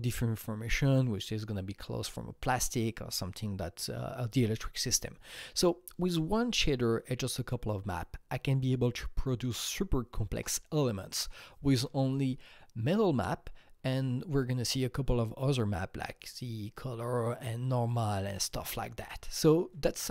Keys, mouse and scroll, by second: 12.8 click, 13.2-15.0 scroll up 8, 15.0-15.4 scroll up 1, 15.4 click.